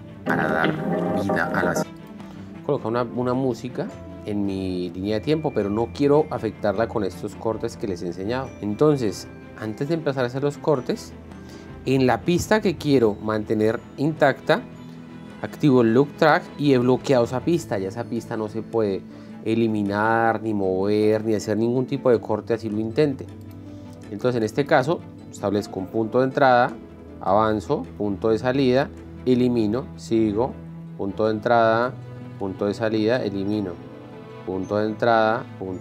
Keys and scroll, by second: 0.1 space, 26.1 i, 26.9 l, 28.1 k, 28.6 o, 29.9 End, 29.9 l, 31.1 k, 32.3-35.8 typing.